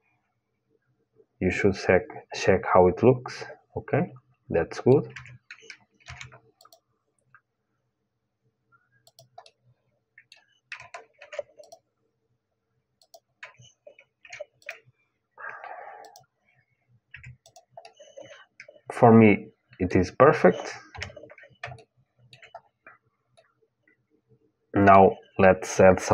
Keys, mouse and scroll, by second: 0.1-1.6 middle drag, 4.9 Tab, 5.8 ctrl+r, 9.2-11.2 middle drag, 10.9 ctrl+r, 13.9 ctrl+r, 16.8 Tab, 17.2-19.6 drag, 17.5-18.9 middle drag, 20.6 KP_1, 21.5-26.1 middle drag.